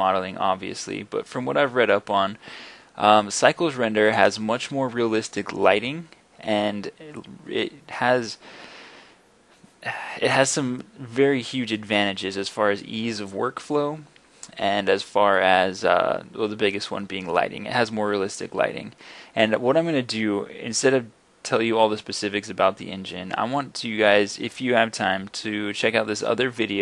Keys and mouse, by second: 11.9 middle drag, 12.0-12.4 middle drag, 12.4 click, 12.6 middle click, 13.6 click, 14.2 middle click, 14.6-26.8 middle drag.